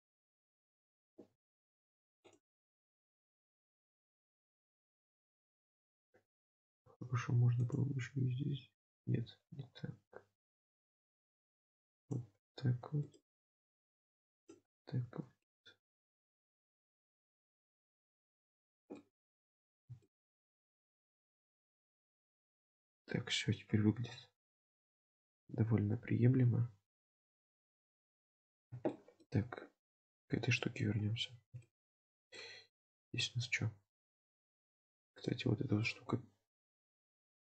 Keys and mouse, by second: 7.1 ctrl+r, 9.0 ctrl+z, 19.0 middle click, 20.1 shift+middle click, 20.7 shift+middle click, 21.5 Tab, 22.4-23.7 middle drag, 24.1 KP_Decimal, 24.9-28.6 middle drag, 28.9-29.3 shift+middle drag, 30.2 click, 30.6 shift+middle drag, 31.7 shift+middle drag, 32.4-33.0 middle drag, 34.5 Tab, 35.2 click, 36.1 KP_7, 36.7 Tab, 37.2 shift+middle click.